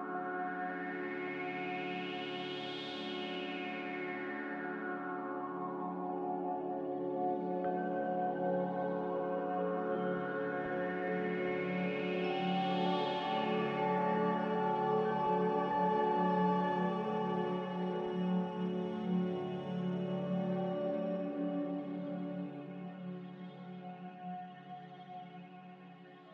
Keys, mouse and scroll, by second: 5.9 z, 11.6 5, 12.5 Return, 17.7 middle click, 18.4 middle click, 22.9 Return.